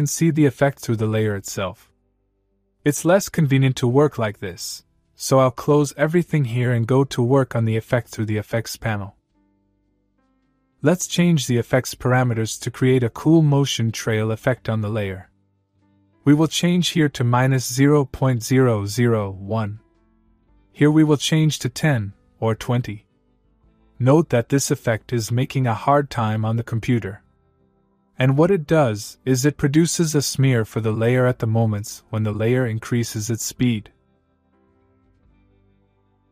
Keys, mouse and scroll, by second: 1.2 click, 4.5 click, 9.9 scroll up 1, 11.2 click, 11.9 Right, 21.3 click, 24.2 click, 27.4-30.1 click, 30.2-30.7 scroll down 1, 30.7-31.9 middle click, 32.6-36.3 click.